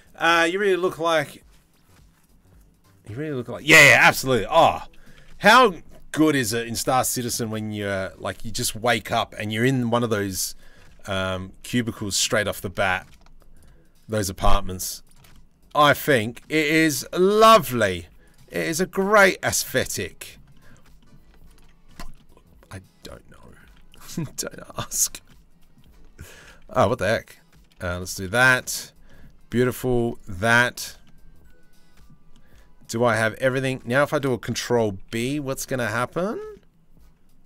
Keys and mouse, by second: 4.7 z, 6.2 Tab, 7.1 Tab, 10.9 2, 11.8 middle click, 12.4 middle click, 14.9 middle click, 17.6 z, 19.2 shift+z, 23.2 z, 31.9-33.3 shift+middle drag, 34.6 ctrl+b.